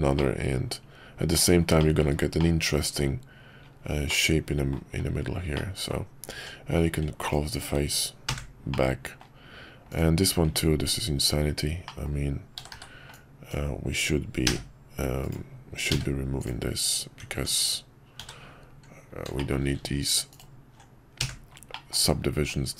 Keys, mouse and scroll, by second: 0.1-1.4 middle drag, 1.8 shift+middle click, 2.4-3.0 middle drag, 4.1-4.8 middle drag, 5.6 middle drag, 6.3 Tab, 8.4 f, 8.7 middle click, 10.4 Tab, 11.8 middle click, 12.6 w, 12.7 w, 13.4-14.4 drag, 14.4 d, 15.9 x, 17.2 Tab, 18.2 w, 19.4 shift+middle click, 20.3 alt+click, 21.3 f, 21.7 middle click, 22.3 Tab.